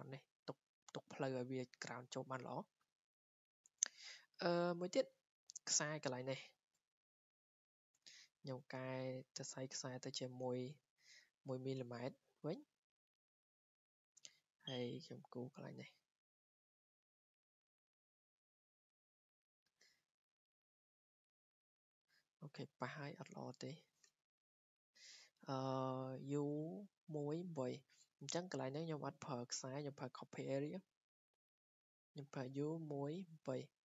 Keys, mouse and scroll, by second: 0.0 click, 0.5 Escape, 2.3-2.9 scroll down 4, 2.9 scroll, 3.5 scroll, 4.4 scroll down 3, 7.2 click, 7.3 scroll down 3, 8.0 1, 9.3 click, 12.5-14.4 drag, 15.4 click, 16.5 click, 21.6 click, 22.5 scroll down 4, 23.4 Escape, 23.9 click, 24.7 Delete, 26.9 scroll up 4, 28.1 Escape, 29.8 click, 31.5 click, 33.6 click.